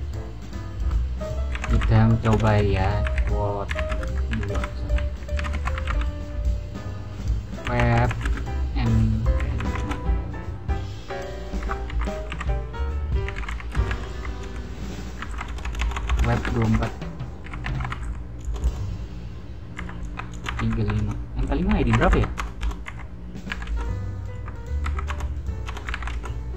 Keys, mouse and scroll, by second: 1.2-6.2 typing, 4.5 Return, 7.3-18.4 typing, 11.5 Escape, 20.0-25.8 typing, 20.9 Return, 23.6 Return.